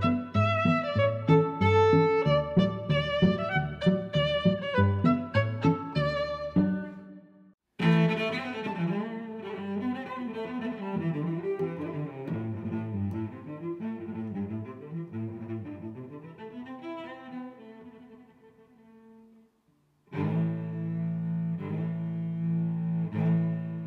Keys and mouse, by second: 0.9 click, 0.9 s, 7.0 middle click, 11.2 click, 12.4 middle click, 13.3 click, 14.7 g, 15.6 click, 16.2 s, 17.5 click, 17.9 click, 18.4 h, 18.8 click, 19.3 z, 19.6 click, 20.4 h, 21.2 g, 21.7 y.